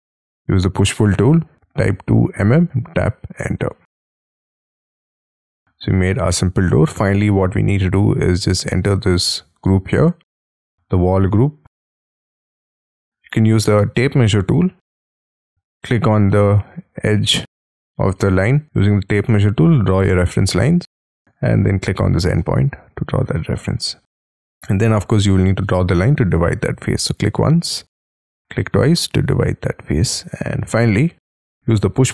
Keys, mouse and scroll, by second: 1.5 m, 3.4 Return, 3.9 space, 4.3 Escape, 4.5 Escape, 4.7-5.2 scroll down 16, 5.2 scroll up 1, 5.3 middle click, 6.9 shift+middle click, 7.5-8.4 scroll up 4, 8.4 double click, 8.9 double click, 11.2 j, 12.0 j, 12.3 j, 12.7-13.0 scroll up 6, 13.1 scroll down 7, 14.1 t, 14.5-15.5 scroll up 3, 15.5 Escape, 17.9 scroll up 5, 18.6-19.3 scroll down 6, 19.5-20.0 shift+scroll down 4, 20.0-20.4 shift+scroll up 9, 21.9 shift+click, 22.4 space, 22.9-23.3 scroll down 6, 23.3 middle click, 23.9 scroll down 4, 24.2 l, 24.4 scroll up 5, 28.7 space, 30.0 double click, 30.2-31.4 scroll down 10, 31.4 p.